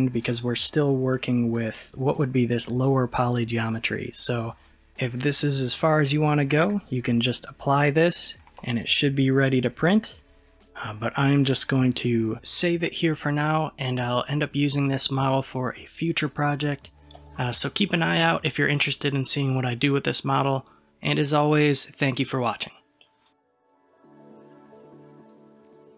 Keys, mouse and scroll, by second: 4.7 click, 7.9-16.4 middle drag.